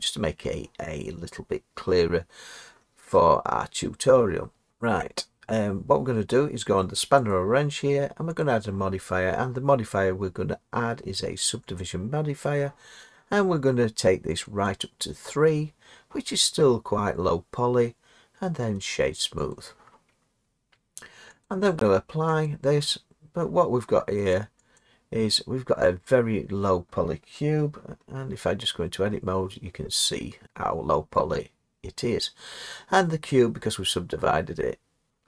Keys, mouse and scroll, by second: 0.4-4.7 drag, 7.2-8.9 drag, 14.4 click, 14.8 click, 18.7 right click, 19.5 click, 21.4 click, 23.5 scroll, 24.8 click, 28.2 Tab.